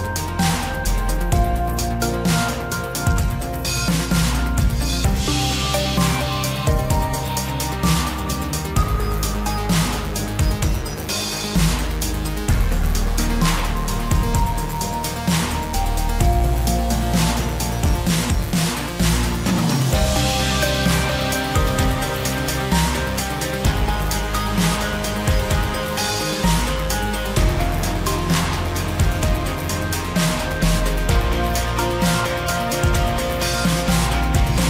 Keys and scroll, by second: 22.3 ctrl+t.